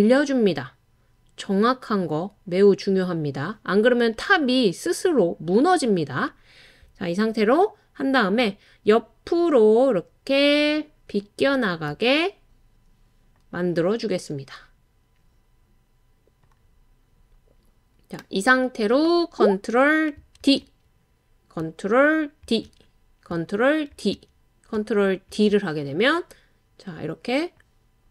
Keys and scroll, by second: 8.4-9.2 Right, 20.4 super+d, 22.4 super+d, 23.9 super+d, 25.3 super+d.